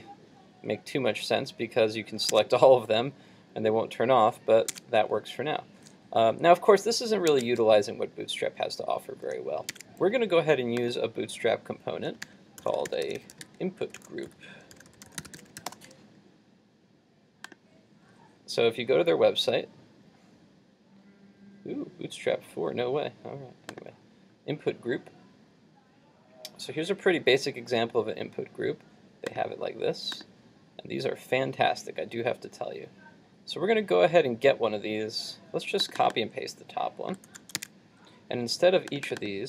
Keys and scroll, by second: 2.3 super+Tab, 7.4 super+Tab, 12.3 super+t, 37.3 super+c, 37.7 super+Tab.